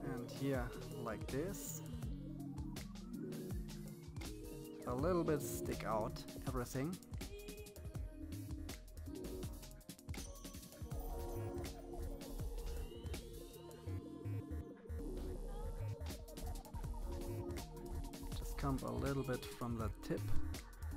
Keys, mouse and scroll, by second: 1.0 click, 2.2 middle click, 2.7 middle click, 3.0 click, 3.7 middle click, 4.2 click, 5.1 click, 6.4 middle click, 6.8 middle click, 7.4 click, 8.4 click, 9.7 middle click, 10.2 middle click, 10.9 click, 11.8 click, 12.9 click, 13.6 middle click, 14.2 middle click, 14.3 KP_3, 14.7 click, 16.1 click, 16.5 click, 17.2 click, 19.1 click, 20.6 click.